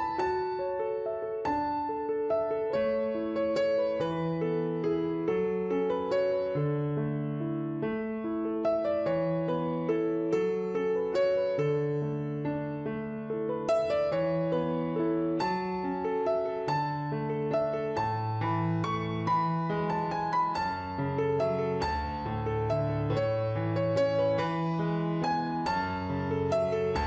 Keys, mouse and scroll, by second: 1.9 click, 3.9 click, 5.2 click, 10.9 w, 11.2 click, 12.1 click, 14.5 click, 17.0 click, 20.2 click, 23.1 q, 23.4 click, 24.3 click, 25.4 click.